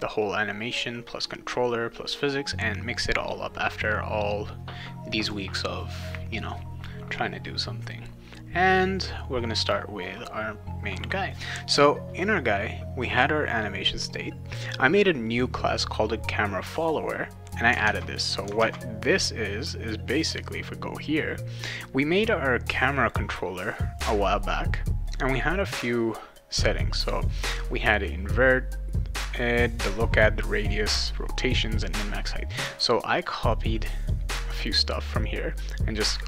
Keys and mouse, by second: 9.6 click, 17.8 alt+Tab, 18.6 alt+Tab, 20.2 click, 21.8-23.1 drag, 25.7-27.3 drag, 33.5-34.6 drag, 35.7-36.2 drag.